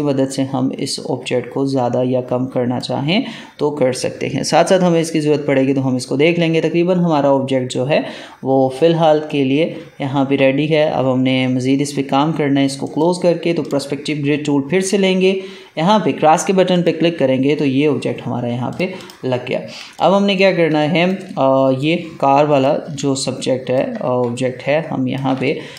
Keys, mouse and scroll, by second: 12.8 right click, 13.5 click, 16.6 click, 19.4 alt+scroll down 1, 19.8 space, 19.8 click, 20.3 space, 20.7 click, 22.9 ctrl+space, 23.0 ctrl+click, 23.4 ctrl+space, 24.1 ctrl+space, 24.2 ctrl+click, 24.6 ctrl+space, 25.4 click.